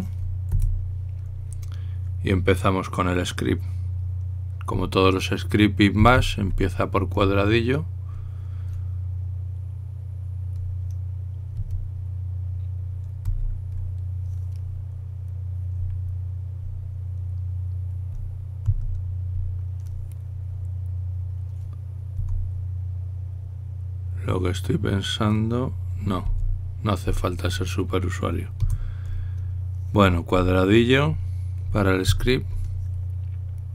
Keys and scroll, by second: 1.4 Delete, 6.8 shift+3, 14.0 i, 19.5 shift+3, 32.9 #.